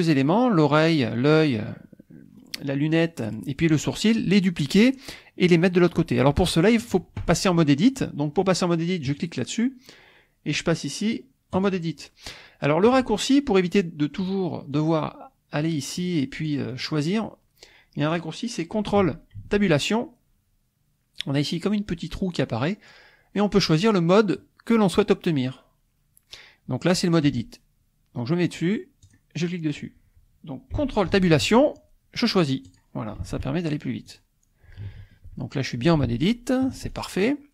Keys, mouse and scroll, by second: 9.1 click, 11.6 click, 13.6 click, 14.2 click, 14.7 click, 15.6 click, 16.0-17.6 drag, 18.0 click, 19.5 ctrl+Tab, 29.0-30.7 drag, 31.2 ctrl+Tab, 32.7 click, 33.2 ctrl+Tab, 34.1 click, 35.0 ctrl+Tab, 36.1 ctrl+Tab, 37.1 ctrl+click.